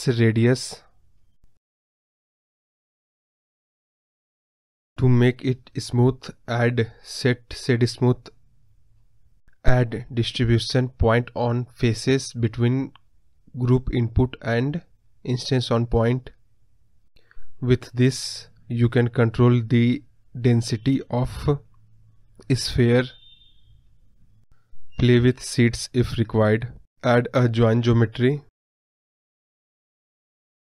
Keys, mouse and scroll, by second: 1.2-1.7 scroll down 1, 3.0 click, 3.3 scroll up 1, 3.4 scroll down 2, 3.7 KP_Decimal, 3.9 scroll up 3, 4.1 middle click, 5.0 scroll up 5, 5.2-5.6 scroll down 1, 5.6 ctrl+z, 10.0-10.5 scroll up 1, 10.5-11.1 scroll up 1, 11.1-12.5 drag, 12.5-12.9 scroll down 3, 12.6 middle click, 12.9-26.1 middle drag, 26.1 scroll up 1, 26.1 middle click, 26.8-28.4 scroll down 4.